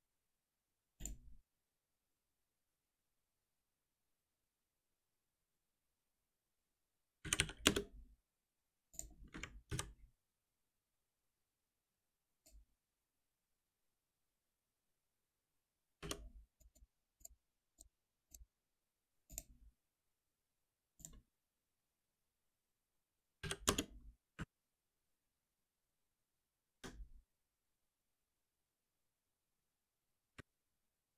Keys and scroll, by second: 7.6 Return, 11.3 ctrl+alt+n, 16.0 alt+F7, 23.6 Return, 24.4 shift+F10, 26.0 alt+3.